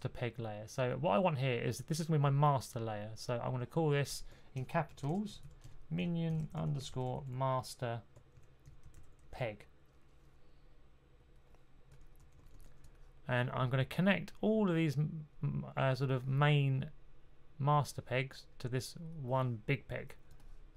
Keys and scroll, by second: 4.2-9.6 typing, 12.1 typing.